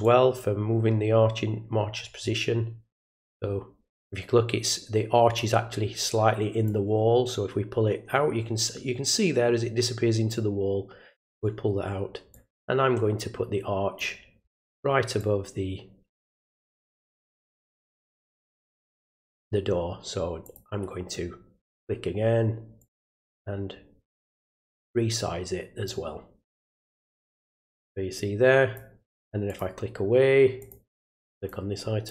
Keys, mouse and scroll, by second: 0.0-5.3 drag, 6.6-11.3 drag, 12.3-13.9 drag, 15.2 click, 20.4 click, 21.6 click, 22.8-25.8 drag, 27.0 click, 29.5 click, 30.6 click, 30.9 click, 31.3 click, 32.0 click.